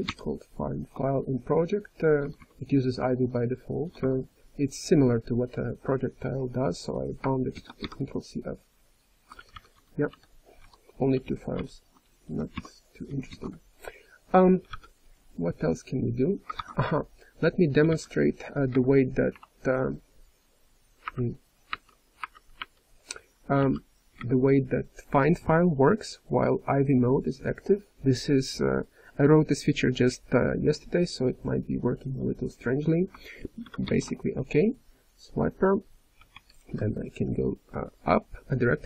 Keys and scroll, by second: 5.3-6.0 typing, 9.0-9.8 typing, 10.1 ctrl+n, 10.5 ctrl+p, 11.1 ctrl+n, 11.6 Return, 12.3 d, 13.3 ctrl+:, 14.7 v, 17.9 v, 22.3-23.5 typing, 33.9 ctrl+f, 35.5 v, 36.3 BackSpace.